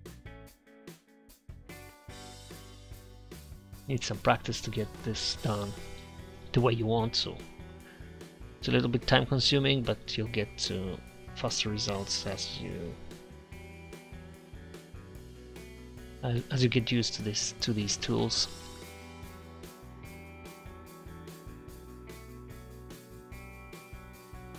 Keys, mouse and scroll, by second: 1.1 click, 1.1 f, 1.4 f, 2.0-4.1 drag, 4.1 middle click, 4.5 click, 4.7 click, 4.9 click, 5.4 click, 6.3 click, 6.8 f, 6.9 click, 6.9 f, 7.8 click, 8.3 click, 9.2 f, 9.4 f, 9.9 click, 10.8 f, 10.9 f, 12.6 ctrl+z, 12.7 ctrl+z, 16.5 middle click, 18.8 KP_Enter, 18.8 KP_3, 19.5 click, 21.1 f, 21.3 click, 22.6 click, 23.4 click, 24.0-24.5 drag.